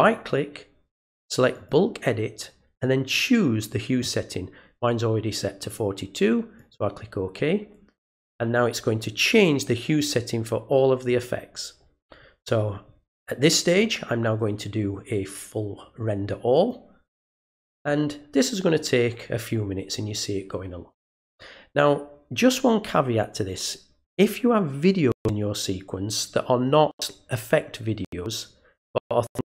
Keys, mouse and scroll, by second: 0.1 right click, 1.5 click, 6.5 click, 16.5 click.